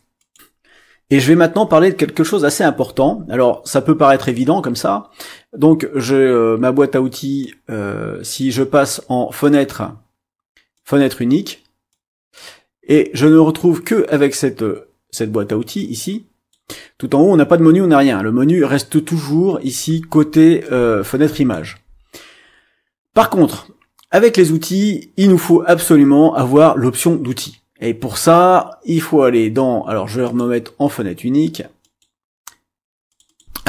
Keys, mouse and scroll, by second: 0.2 click, 7.4-8.5 drag, 9.4 click, 10.9 click, 12.0 click, 13.2-14.2 drag, 15.7 click, 20.6-21.8 drag, 30.2 click, 31.8 click, 33.1 click.